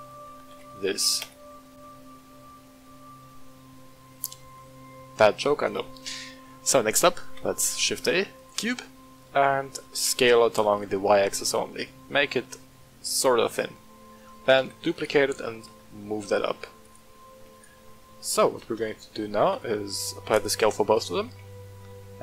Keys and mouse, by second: 4.9-5.5 middle drag, 6.4-6.7 middle drag, 7.2 shift+a, 8.9 middle click, 9.8-10.2 middle drag, 10.4 s, 10.7 y, 13.4 click, 13.8 middle click, 14.6 shift+d, 14.9 click, 15.3 g, 15.5 z, 16.8 click, 17.5 right click, 17.9-18.3 middle drag, 18.7 a, 19.4 ctrl+a, 20.9 click, 21.4 Tab.